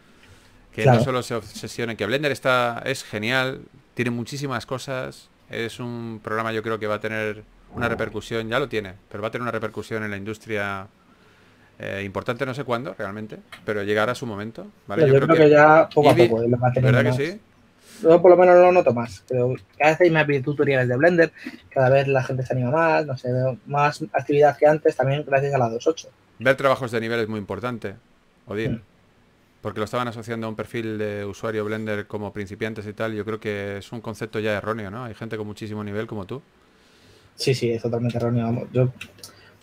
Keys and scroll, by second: 1.0-2.5 typing, 14.1 4, 14.9 super+z, 16.2-17.4 typing, 20.4 s, 22.8 typing, 25.0 typing, 28.1-29.0 typing, 30.6-33.4 typing, 37.8 typing.